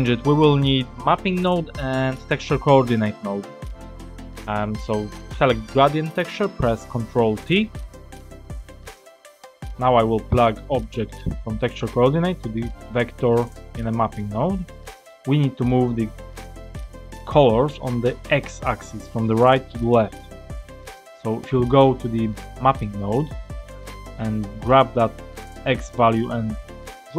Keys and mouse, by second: 2.4 click, 8.0 ctrl+t, 8.9 click, 10.6-13.5 drag, 14.7 middle click, 21.5-22.7 drag, 24.6-27.1 drag.